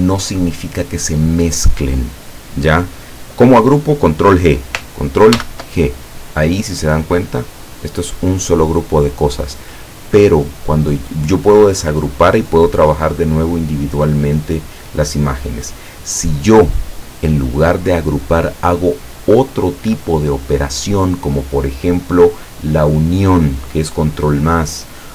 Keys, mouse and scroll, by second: 5.4 ctrl+g, 7.0-7.7 drag, 7.8 click, 8.2 click, 11.3-12.1 drag, 21.0 click.